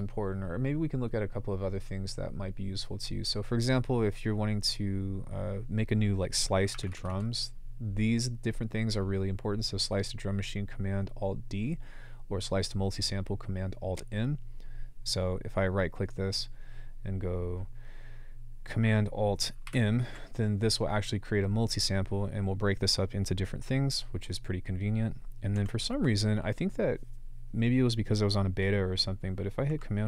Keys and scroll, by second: 6.5-7.6 typing, 19.7 alt+super+m, 25.6 BackSpace.